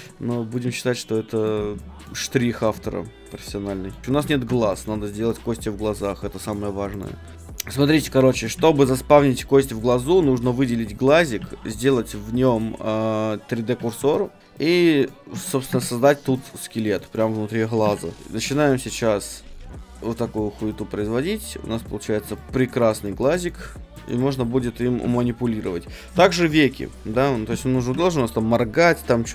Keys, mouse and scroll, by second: 0.0 right click, 0.5-1.9 middle drag, 1.8 click, 1.8 right click, 2.5 middle click, 2.6-4.0 drag, 4.0-5.0 middle drag, 4.4 ctrl+Tab, 5.0-7.0 right drag, 6.4 click, 7.3 right click, 7.3 shift+s, 7.7-10.1 middle drag, 8.6 a, 10.1-12.6 right drag, 11.4 shift+s, 13.8 a, 14.1 middle click, 14.5-17.0 right drag, 15.3 Tab, 15.8 shift+a, 16.3 middle click, 17.7 g, 18.2-21.1 drag, 21.1 middle click, 21.5 middle click, 21.7 middle click, 21.8 click, 21.9 middle click, 22.1 middle click, 22.4 middle click, 25.0-26.2 middle drag, 25.0 KP_1, 26.1 KP_3, 27.9 a.